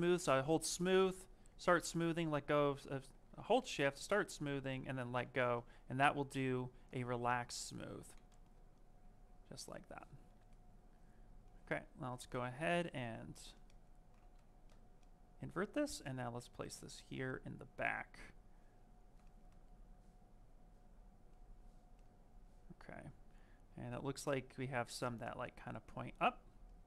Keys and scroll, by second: 3.1 ctrl+z, 4.9 ctrl+z, 5.3-6.0 typing, 7.8 ctrl+z, 12.0 ctrl+z, 14.2 ctrl+z.